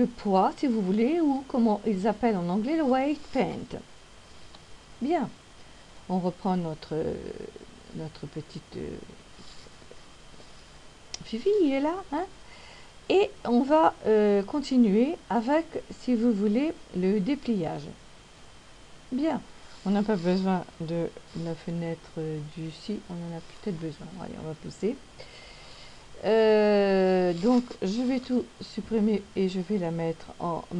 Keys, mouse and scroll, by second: 4.6 KP_3, 8.1 scroll down 1, 9.3-9.8 scroll up 1, 28.8 a, 30.5 e.